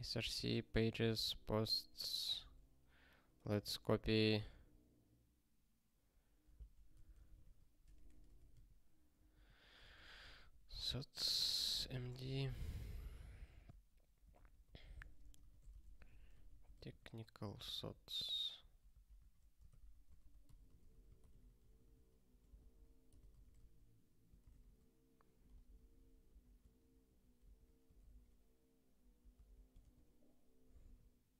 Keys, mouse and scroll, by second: 2.3 ctrl+f, 3.5 shift+c, 12.0 shift+c, 12.7 Return, 13.6 ctrl+e, 14.3 alt+b, 14.5 alt+b, 14.9 alt+f, 15.2-17.4 typing, 17.5 ctrl+n, 17.7 ctrl+n, 18.9 ctrl+p, 19.9 ctrl+e, 20.1 alt+b, 20.4-21.4 typing, 21.5 ctrl+n, 21.7 ctrl+n, 22.5 alt+b, 22.7 alt+b, 23.1 alt+d, 23.3 t, 24.5 ctrl+s, 25.5 super+b, 26.3 super+b, 27.4 super+b, 28.3 ctrl+k.